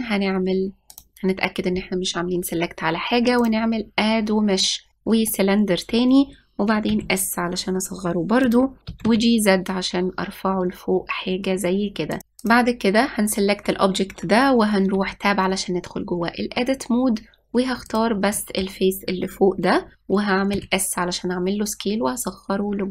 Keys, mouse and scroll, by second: 1.6 click, 4.1-6.8 drag, 7.6 s, 9.6 g, 13.1 click, 15.6 Tab, 18.6 click, 19.0-21.2 middle drag, 21.2 s.